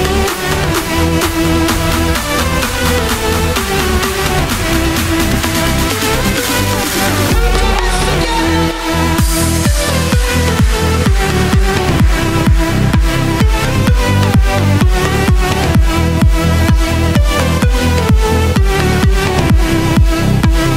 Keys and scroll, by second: 0.5 super+v.